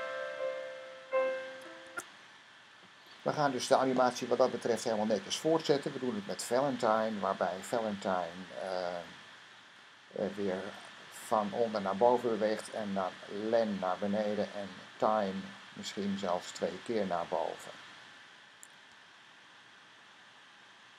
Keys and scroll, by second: 1.8 Escape.